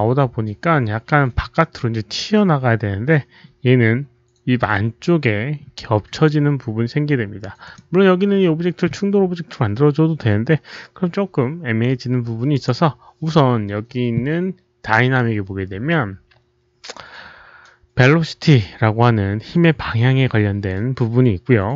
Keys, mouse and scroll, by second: 0.2 click, 7.6 click, 8.8 click, 12.4 click, 14.7 click.